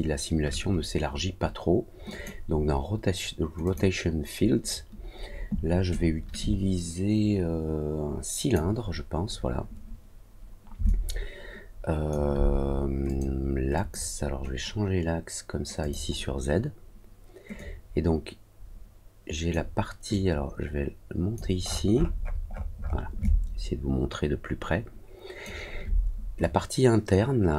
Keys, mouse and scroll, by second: 2.0 click, 3.6 click, 5.8-8.5 drag, 10.8-12.0 alt+drag, 13.0 click, 13.7 click, 15.7 click, 17.5-19.4 drag, 20.0-21.3 drag, 21.6-22.6 scroll up 5, 22.7 scroll down 2, 23.1-25.4 alt+drag, 26.3-27.5 drag.